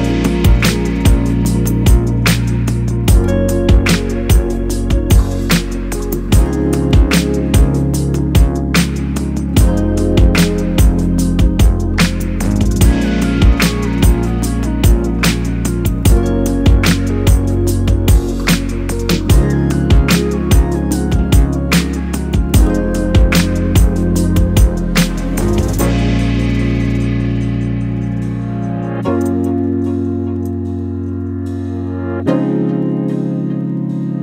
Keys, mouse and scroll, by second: 1.8 Delete, 3.3 Delete, 4.0 scroll down 1, 4.3-6.3 middle drag, 6.3 click, 8.7 Delete, 9.4 Delete, 10.1 click, 10.8-12.7 middle drag, 12.5 Tab, 12.7 click, 13.6 Delete, 15.1 KP_0, 15.9-16.2 scroll up 1, 16.2 scroll down 1, 17.7-18.5 scroll up 1, 19.9 scroll down 1, 21.1 click, 22.7-33.7 drag.